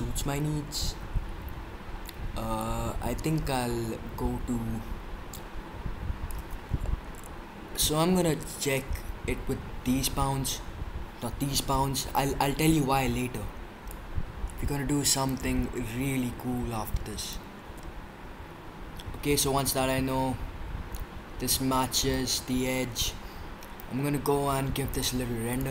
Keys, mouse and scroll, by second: 6.8-11.4 middle drag, 13.9-15.7 drag, 16.5-17.4 drag, 17.4 middle drag, 17.5 drag, 17.6 middle click, 17.7 click, 17.9-21.1 middle drag, 21.2 middle click, 21.3 click, 22.1 drag, 24.9-25.7 drag.